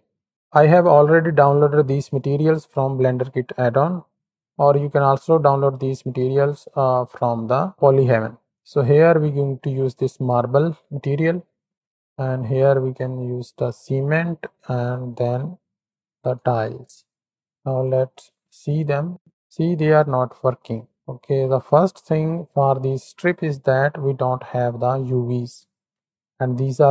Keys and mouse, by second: 8.4 middle click, 9.0-10.2 drag, 11.5 middle click, 11.7-13.9 drag, 14.6-16.5 drag, 17.1 click, 17.6 z, 19.0-19.8 drag.